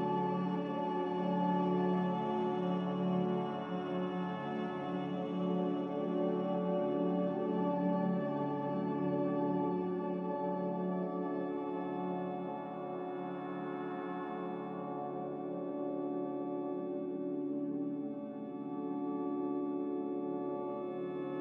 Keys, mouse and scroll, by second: 3.0 z, 6.0 Escape, 13.5-14.8 typing, 17.7 b.